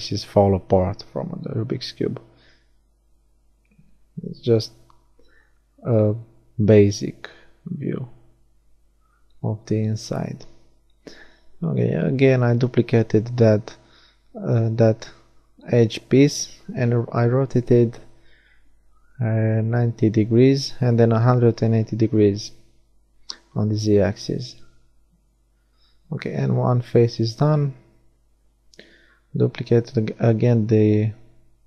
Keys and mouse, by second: 3.0 KP_7, 5.1 shift+d, 5.7-8.4 drag, 6.7 r, 10.3 shift+d, 11.4 r, 12.4-14.0 middle drag, 16.0 middle click, 18.2-19.8 middle drag, 24.0-26.6 middle drag, 27.4 right click, 27.7 shift+d, 29.5 r.